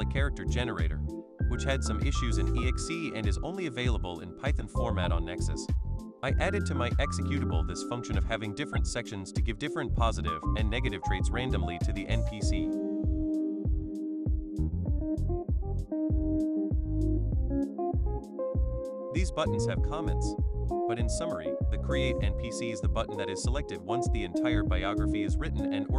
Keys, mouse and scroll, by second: 2.1 click, 2.4 click, 2.6 click, 2.8 click, 4.5 click, 4.7 click, 4.9 click, 6.7 click, 8.4 click, 8.8 click, 9.1 click, 9.4 click, 9.7 click, 10.0 click, 12.0 click, 12.4 click, 12.7 click, 13.0 click, 13.3 click, 13.5 click, 14.9 click, 15.7 BackSpace.